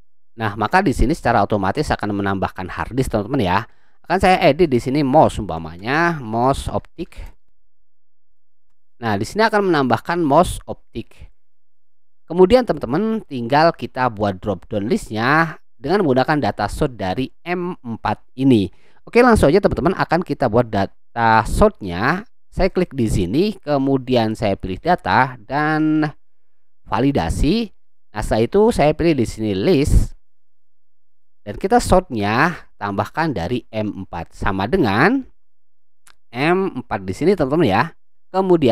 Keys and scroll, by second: 0.0-0.5 typing, 5.8 space, 6.9-8.5 typing, 8.6 Return, 35.3 =.